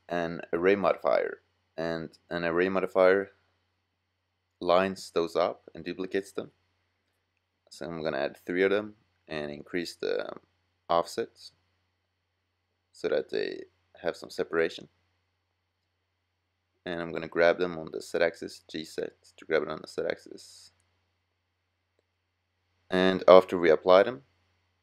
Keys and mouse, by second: 1.2-6.5 middle drag, 15.8 g, 16.3 middle click, 21.2 middle click.